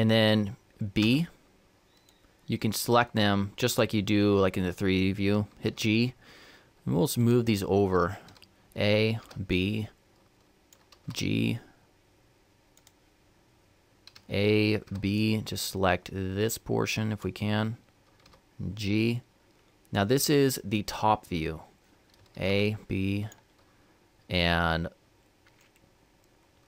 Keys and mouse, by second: 5.4 g, 8.0 a, 10.8 b, 10.8 g, 13.9 a, 18.0 b, 18.0 g, 21.9 a, 26.5 g.